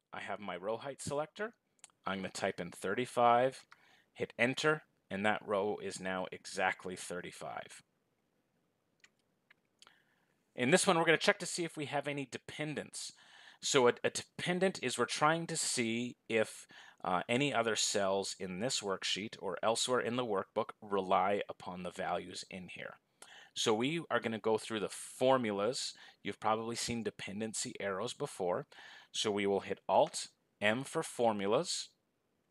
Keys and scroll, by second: 30.5 alt+d.